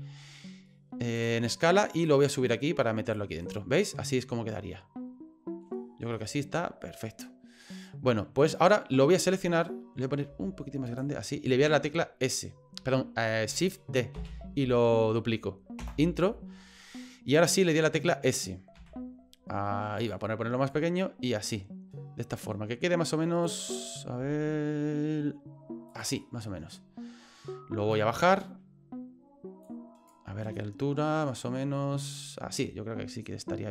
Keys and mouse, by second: 2.1-3.1 drag, 3.4 right click, 3.8-5.6 middle drag, 6.1-7.6 middle drag, 8.4 right click, 10.3 s, 14.1 shift+d, 17.3 middle click, 17.5 click, 18.7 s, 20.8 click, 22.3-23.4 drag, 24.2 s, 26.2 middle click, 28.1 click, 29.7 click, 30.5-32.1 middle drag.